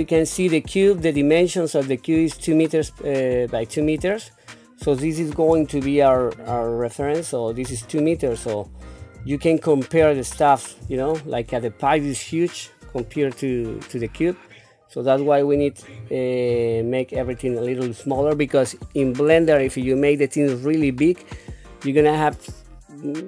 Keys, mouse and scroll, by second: 5.5 n, 6.4-7.0 scroll down 1, 7.2 shift+middle click, 8.3 shift+middle click, 9.2-9.6 scroll down 3, 10.2 shift+middle click, 15.8 shift+middle click, 16.7-17.2 scroll up 4, 17.4 shift+middle click.